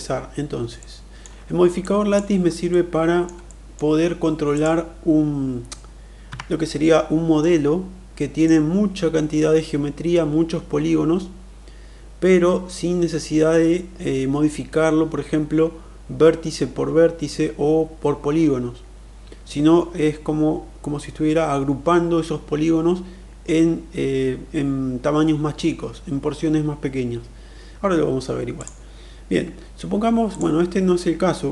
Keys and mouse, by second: 0.8-1.1 alt+middle drag, 1.8 alt+click, 2.7-3.3 middle drag, 3.5 middle click, 4.5 click, 6.6 Tab, 7.4-8.5 middle drag, 28.4 click.